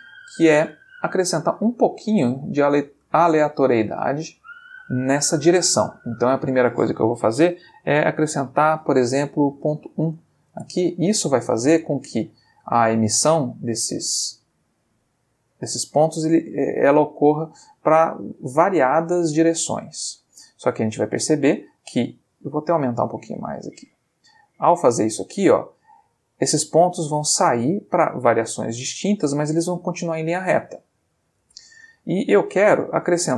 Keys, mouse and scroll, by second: 6.1 click, 9.5 ., 9.8 1, 10.4 Return, 10.5 space, 22.8-24.2 drag, 24.5 click, 31.4 space, 32.9-33.3 middle drag.